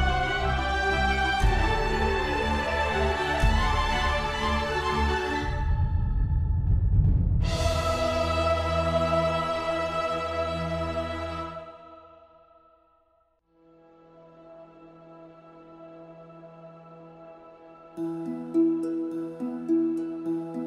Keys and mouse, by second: 0.0 click, 0.5 click, 0.9 click, 1.2 click, 1.5 KP_0, 2.4 click, 2.7 KP_0, 3.6 click, 3.8-5.1 drag, 4.1 KP_0, 6.4 click, 6.8 click, 7.9-9.3 drag, 10.5 click, 11.3 shift+click, 11.7 shift+d, 11.8 shift+z, 12.4 click, 12.9-20.6 typing, 13.6 click, 14.3 click, 15.2 click, 15.6 click, 16.2 click, 17.2 right click, 17.8 click, 18.1 right click, 18.5 right click, 18.8 click, 20.4 click.